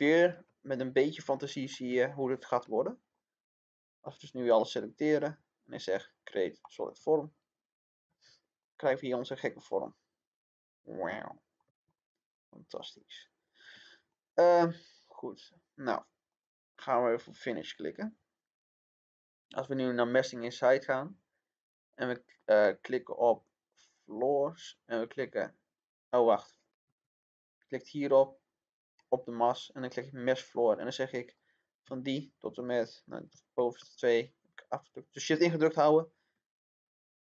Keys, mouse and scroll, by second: 2.9 scroll down 1, 3.5-5.1 drag, 8.8-11.9 middle drag, 11.9 scroll up 1, 14.8 click.